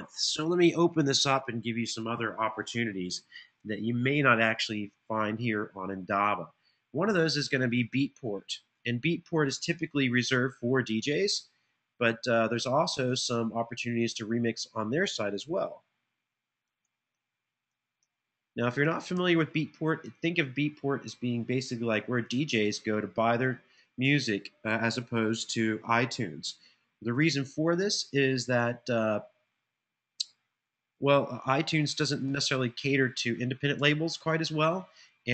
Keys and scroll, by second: 15.4 typing, 17.2-19.8 typing, 30.1-32.5 typing, 33.6 Return.